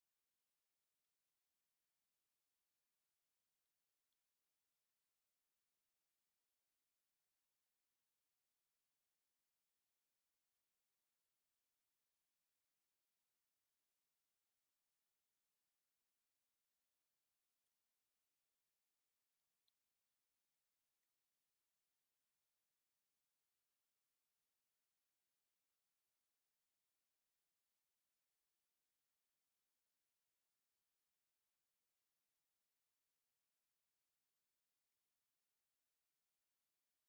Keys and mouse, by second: 0.7 middle drag, 1.7 middle drag, 3.3 middle drag, 3.9 shift+middle drag, 4.9 middle click, 5.7 middle click, 6.5 middle click, 7.2 middle click, 8.2-10.2 drag, 10.7 middle click, 11.7 middle click, 12.9-17.5 drag, 19.1 middle click, 20.3 ctrl+shift+click, 21.8 middle click, 23.3-24.5 drag, 27.5-30.7 shift+drag, 31.6 middle drag, 32.5 ctrl+shift+click, 33.9 middle drag, 34.9 shift+middle drag, 35.2 middle click.